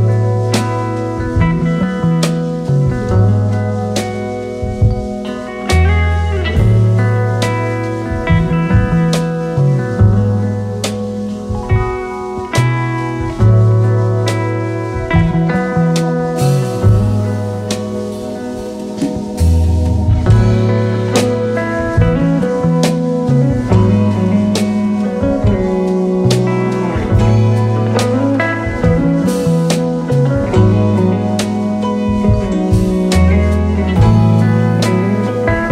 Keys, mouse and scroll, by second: 0.5 right click, 4.2 right click, 5.4 right click, 5.4 alt+Tab, 6.5 ctrl+v, 7.5-7.9 alt+scroll down 3, 10.3 space, 11.2 space, 14.7 space, 15.1 alt+scroll up 1, 15.6 space, 19.9-20.2 alt+scroll up 2, 21.0 alt+scroll down 1, 22.1 typing, 23.4-26.0 typing, 29.3-30.1 typing, 32.8-35.3 typing, 35.3 double click.